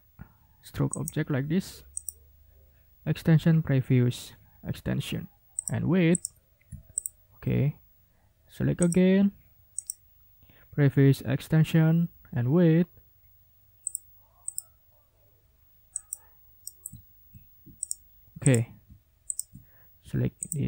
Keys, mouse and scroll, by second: 0.9 click, 1.9 click, 5.6 click, 6.1 click, 6.9 shift+click, 8.8 click, 9.8 click, 13.8 click, 14.5 click, 15.9 click, 16.6 ctrl+click, 17.0 ctrl+scroll down 2, 17.8 click, 18.4 click, 19.3 shift+click, 20.4 shift+click.